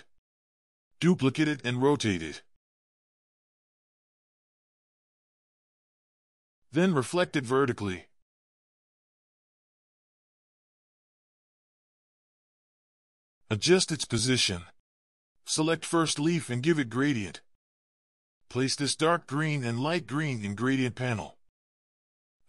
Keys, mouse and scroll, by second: 0.1 ctrl+], 0.5 ctrl+[, 2.4 alt+click, 7.5 right click.